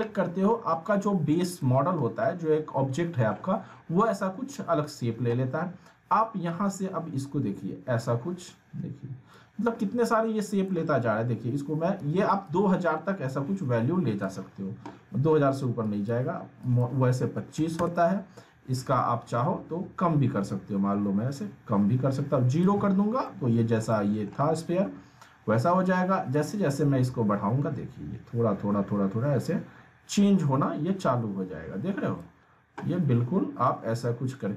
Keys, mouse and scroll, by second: 1.6-2.2 alt+Num_Lock, 1.6-6.5 alt+middle drag, 6.5-9.6 drag, 10.0-11.0 alt+middle drag, 12.0 ctrl+z, 12.4-14.3 drag, 19.0-19.6 middle drag, 20.5-22.7 drag, 23.2-23.8 middle drag, 26.3-32.2 drag, 27.2-32.2 drag.